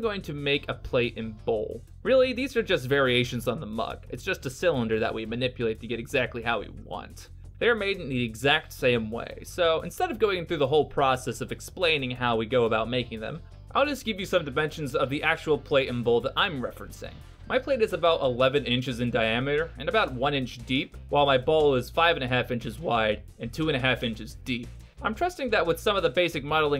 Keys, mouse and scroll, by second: 0.1 middle click, 0.2 Tab, 0.3 alt+right click, 0.4 s, 1.0 middle click, 1.8 middle click, 1.9 shift+middle click, 2.1 alt+right click, 2.3-5.9 typing, 2.4 scroll up 5, 4.0 middle click, 5.8 click, 6.7 middle click, 6.7 scroll down 4, 6.8 middle click, 7.1 Tab, 7.2 middle click, 7.3 scroll down 1, 7.4 middle click, 7.6 click, 7.6 middle click, 7.7 shift+a, 9.1 click, 10.0 click, 12.1 alt+middle click, 12.2 scroll up 4, 12.3 g, 12.8 shift+Tab, 12.9 g, 13.1 shift+middle click, 13.3 alt+right click, 13.8 Tab, 14.0 shift+h, 14.2 KP_Decimal, 14.3 scroll up 2, 14.5 middle click, 14.6 Tab, 14.7 alt+right click, 14.7-15.0 scroll down 5, 14.9 scroll up 1, 15.0 KP_1, 15.2 ctrl+r, 15.8 alt+right click, 16.1 o, 16.2 s, 17.2 s, 18.1 s, 18.9 alt+right click, 19.1-20.2 typing, 19.4 ctrl+z, 20.6 alt+h, 20.7 Tab, 20.8 middle click, 20.9 scroll up 2, 21.1 middle click, 21.3 alt+right click, 21.4 g, 21.7 middle click, 21.8 right click, 22.1 click, 22.3 right click, 22.5 i, 22.9 shift+z, 23.2 KP_3, 23.6 click, 24.3-25.2 typing, 26.4 middle click, 26.5 Tab, 26.7 middle click.